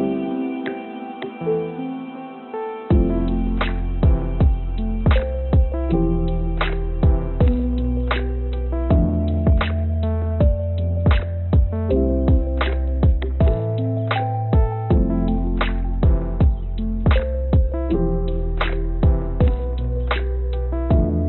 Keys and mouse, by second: 2.6 s, 5.5 g, 8.9-10.4 drag, 11.1 g, 12.8 g, 15.2-16.4 drag, 17.1 g, 19.2-21.2 drag.